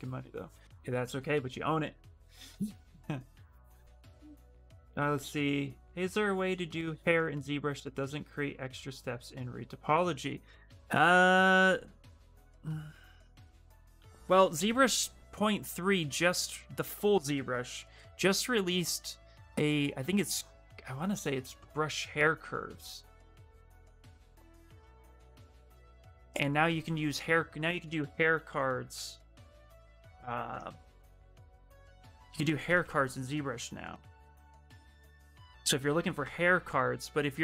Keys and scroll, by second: 28.7 z, 30.0-31.3 typing, 36.0 ., 36.6 3, 37.3 shift+Return.